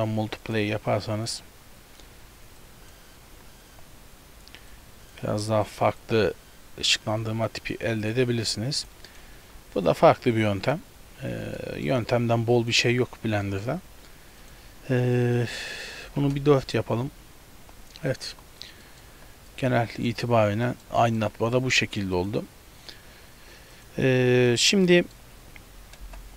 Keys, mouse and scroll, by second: 2.6 click, 4.7 click, 5.1 click, 6.1 click, 7.5 click, 8.8 click, 9.1 click, 9.6 x, 9.8 click, 9.9 x, 10.5 click, 11.6 middle click, 12.6 click, 13.0-14.5 scroll up 4, 13.5 middle click, 14.5 click, 14.5 scroll up 1, 18.3 z, 18.9 middle click, 19.1 z, 19.5 middle click, 20.1-20.7 scroll up 4, 20.7 shift+middle click, 21.0 middle click, 24.2 scroll down 3, 24.5 shift+middle click, 24.9 middle click, 25.4 scroll down 1, 26.1 KP_0.